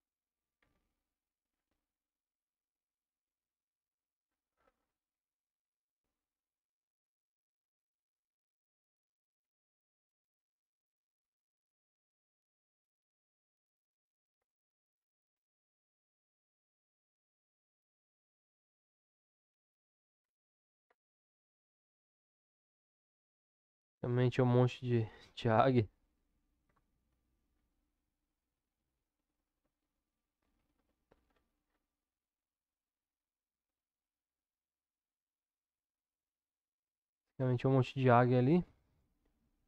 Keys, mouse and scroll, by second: 0.6 Tab, 2.0-4.0 middle drag, 5.1 Tab, 9.4 s, 14.0 Tab, 15.6-19.4 middle drag, 19.4-20.2 drag, 21.0-23.4 middle drag, 23.4-24.4 drag, 24.4-25.4 middle drag, 25.5 Tab, 27.1 ctrl+z, 27.6 ctrl+z, 28.0 ctrl+z, 33.9 click.